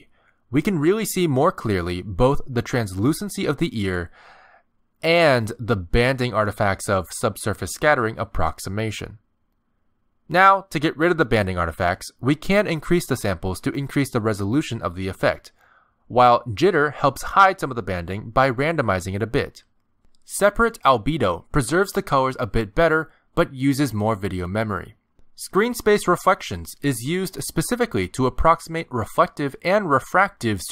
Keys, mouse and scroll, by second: 0.0-0.9 scroll up 6, 0.3 shift+middle click, 1.0 shift+middle click, 1.5 g, 3.2 middle click, 4.3 click, 7.3 shift+middle click, 11.8 click, 14.0 click, 14.5 click, 14.8 click, 15.0 click, 15.3 click, 15.5 click, 15.8 click, 16.7 click, 21.1 click, 25.9 click, 26.5 click, 27.4 click, 28.0 click, 28.6 middle click, 30.5 click.